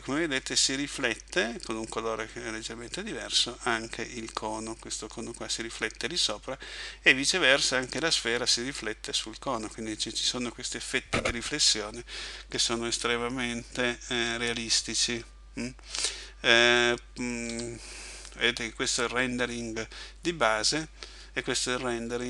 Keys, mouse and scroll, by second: 17.5 Escape.